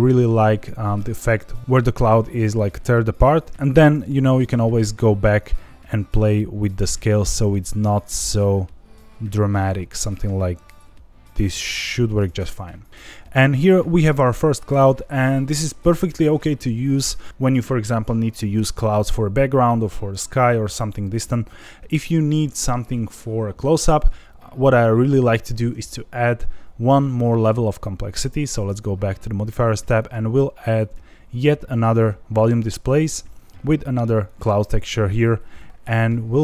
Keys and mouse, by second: 0.6-0.9 middle drag, 3.3 click, 4.3 click, 5.3-12.1 drag, 13.4 middle click, 15.9 ctrl+s, 28.2 click, 30.0-30.9 drag, 33.0 click, 34.3 click, 36.2-36.4 drag.